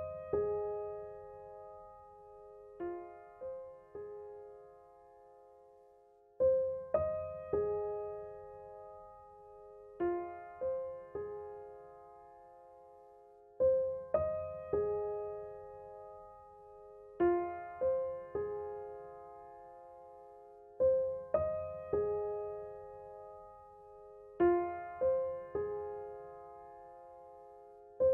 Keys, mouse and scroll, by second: 2.7 click, 9.7 t, 10.2 click, 11.8 ctrl+v, 14.1 ctrl+t, 14.9-18.5 alt+drag, 18.5-24.4 alt+drag, 24.4 alt+click, 26.9-28.1 ctrl+drag.